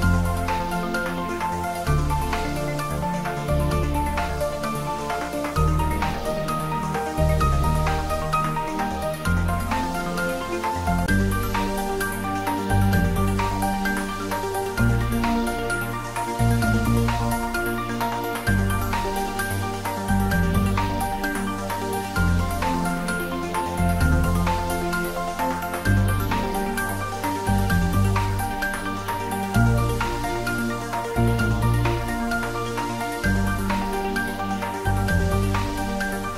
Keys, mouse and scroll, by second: 5.2-5.7 scroll down 1, 5.7-6.6 middle click, 6.8 scroll down 1, 7.3-8.8 middle drag, 9.4 shift+z, 10.5 click, 11.6 3, 12.1 click, 13.4 scroll up 1, 16.7 alt+shift+click, 19.4 ctrl+b, 23.3 click, 24.3 Tab, 25.5 scroll down 1, 26.3 click, 27.5 click, 28.6 Tab, 28.9 click, 31.7-33.2 scroll down 1, 33.2 click, 36.0 scroll up 1.